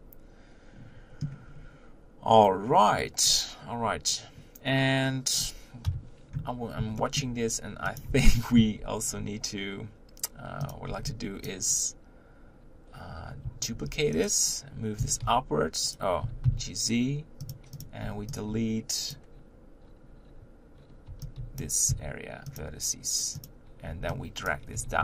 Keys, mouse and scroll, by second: 1.5-5.8 scroll up 2, 5.8 KP_1, 7.0-7.4 shift+middle drag, 7.4-8.0 scroll up 1, 8.0 click, 8.1 Tab, 8.8 z, 9.1-10.7 scroll up 2, 10.7 click, 11.5 b, 13.7 shift+d, 15.0 g, 16.2 g, 17.8 click, 19.1 b, 21.6 b, 22.6 x, 23.4 click, 24.5 b, 24.7 g.